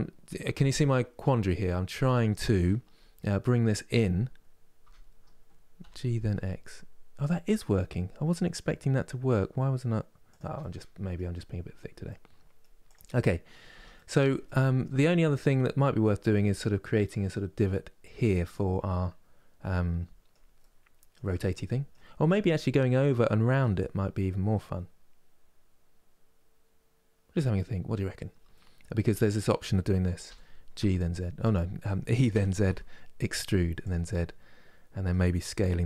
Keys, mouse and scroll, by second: 4.5 Tab, 5.5 g, 10.3 middle click, 11.1 scroll up 3, 11.8 middle click, 12.5 click, 12.9 middle click, 13.4 Tab, 13.6-17.1 middle drag, 18.0-28.9 middle drag, 28.9-30.0 drag, 30.0 g, 33.8-35.5 middle drag, 35.5 s.